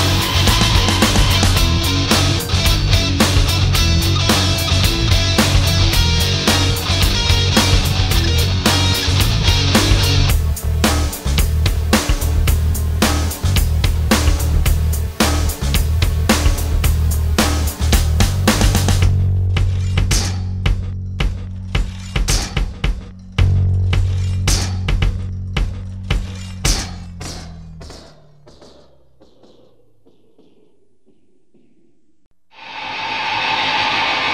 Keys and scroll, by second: 1.9 alt+space, 8.7 ctrl+s.